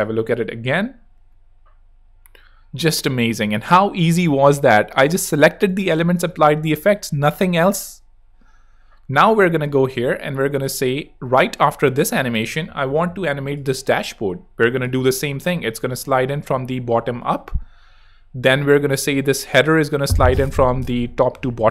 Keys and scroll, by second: 6.2 space.